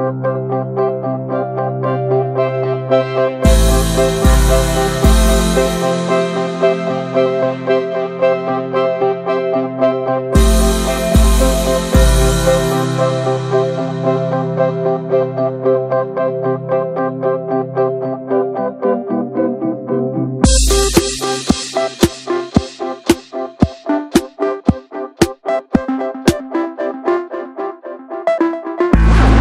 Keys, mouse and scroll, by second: 0.9 middle click, 1.3 e, 2.5 shift+middle click, 2.9 scroll up 1, 3.0 middle click, 3.6 alt+s, 5.5 alt+shift+click, 6.0 middle click, 6.4 alt+shift+click, 6.7 middle click, 7.1 ctrl+b, 8.7 middle click, 8.9 s, 9.6 middle drag, 9.9 ctrl+b, 11.5 scroll down 1, 11.7 middle drag, 11.9 ctrl+z, 12.3 middle click, 12.6 s, 13.4-13.7 middle drag, 13.7 ctrl+b, 15.0 click, 15.2 ctrl+a, 15.4-16.0 scroll down 3, 16.0 shift+middle click, 16.1-17.0 scroll up 3, 16.2 Tab, 16.3 middle click, 16.7 shift+middle click, 17.0 shift+middle click, 17.6 ctrl+r, 20.0 shift+middle click, 20.1 scroll up 1, 20.3 shift+middle click, 20.7 scroll up 1, 20.8 shift+middle click, 21.3 click, 22.3-23.6 shift+middle drag, 23.6 ctrl+r, 26.5 alt+shift+click, 26.8 scroll up 1, 27.0 shift+middle click, 27.4 ctrl+b, 29.1 shift+middle click.